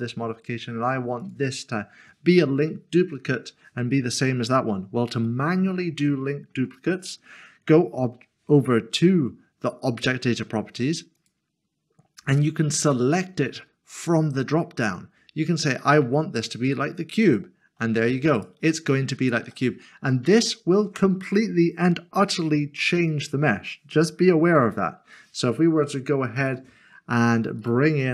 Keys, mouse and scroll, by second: 0.1 middle click, 5.2 click, 5.5 middle click, 11.2 click, 17.2 click, 19.5 click, 19.7 middle click, 20.5 shift+middle click, 22.8 shift+middle click, 24.6 click, 27.6 shift+right click.